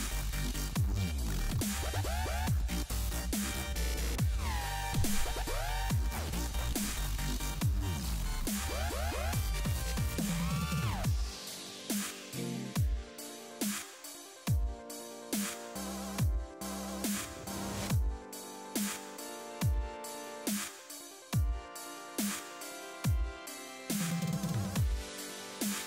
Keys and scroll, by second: 18.9 ].